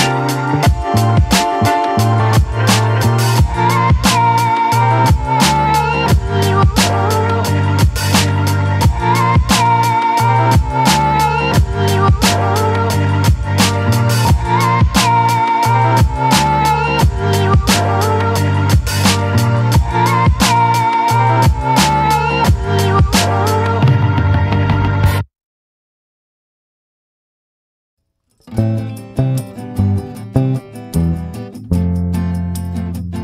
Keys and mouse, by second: 0.1 ctrl+z, 4.4 click, 5.0 click, 6.9 ctrl+z, 8.2 ctrl+i, 9.4 b, 12.9 a, 13.4 ctrl+i, 13.9 b, 14.2 middle click, 15.5 b, 16.5 b, 17.3 b, 19.6 middle click, 20.1 shift+middle click, 20.4 middle click, 20.8 shift+middle click, 21.1 middle click, 21.4 shift+middle click, 22.3 b, 23.4-26.4 typing, 28.2 middle click, 29.6-30.1 ], 30.1-32.0 middle drag.